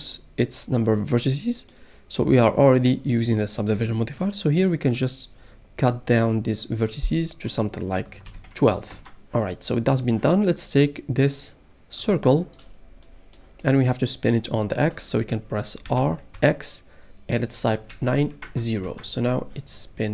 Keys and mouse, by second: 1.6-8.9 drag, 10.0 click, 12.3-13.6 shift+middle drag, 15.9 r, 16.3 x, 17.9 KP_9, 18.4 KP_0, 18.8 KP_Enter.